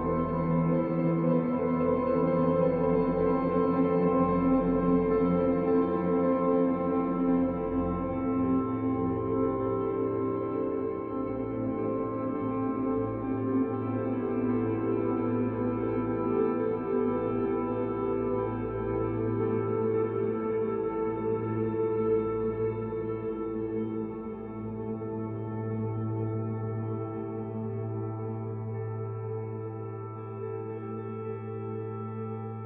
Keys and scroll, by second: 0.0 f, 0.5 e, 0.8 ctrl+alt+1, 2.6 b, 7.0 e, 16.1 e, 19.0 ctrl+alt+1, 19.4 b, 28.6 b.